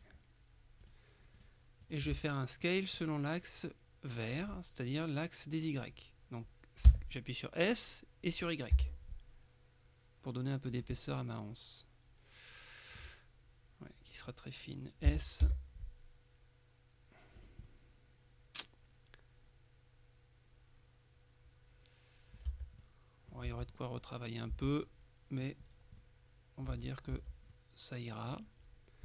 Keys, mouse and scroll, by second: 0.9 right click, 1.9 right click, 2.7 middle click, 7.0 s, 8.8 y, 10.8 click, 15.2 s, 15.5 y, 17.5 click, 22.5 Tab, 22.9 click, 23.6 Tab, 23.8 click, 24.6 Tab, 24.9 click, 25.7-26.1 scroll down 2, 26.1 click, 26.8 Tab, 27.6-28.9 middle drag.